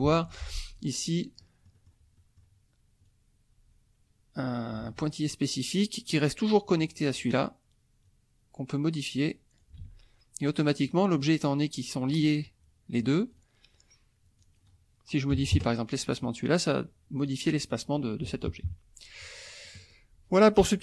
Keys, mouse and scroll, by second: 0.3 F2, 0.7-2.0 drag, 2.2 click, 3.0-4.5 drag, 4.8 ctrl+z, 8.0-9.8 drag, 9.8 ctrl+z, 11.1 click, 13.3 click, 14.4 click, 15.3 KP_1, 15.5 KP_Enter, 17.2 click, 18.2 F1, 18.4 KP_Subtract, 19.5 click.